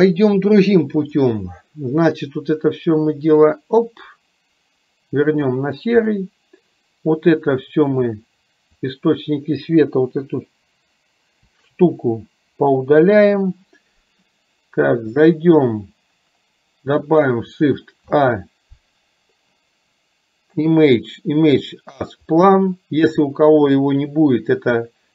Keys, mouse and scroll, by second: 1.2 click, 8.3-9.0 drag, 11.8 Delete, 18.0 shift+a.